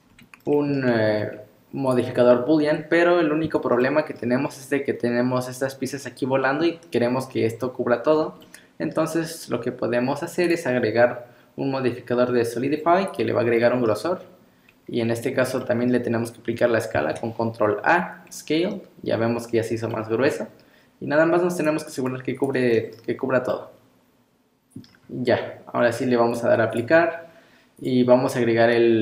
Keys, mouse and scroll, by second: 0.1-1.9 scroll up 2, 0.5 middle click, 1.9 click, 3.8 middle click, 4.4-4.9 scroll up 2, 6.4 middle click, 8.1 scroll down 4, 8.4 middle click, 10.4 click, 10.4 scroll up 1, 13.6 middle click, 14.7 scroll up 2, 15.3 scroll down 1, 15.6 middle click, 17.0 ctrl+a, 19.9 middle click, 21.6 click, 21.8 click, 22.0 click, 22.4 click, 22.8 middle click, 23.5 middle click, 24.9-25.8 scroll down 2, 26.3 click, 27.8 click.